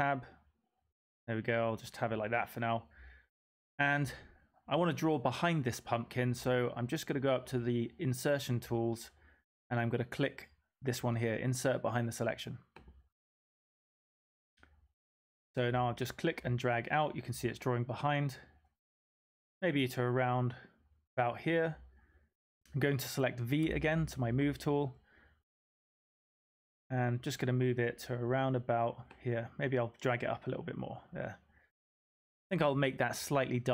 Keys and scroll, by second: 23.6 typing.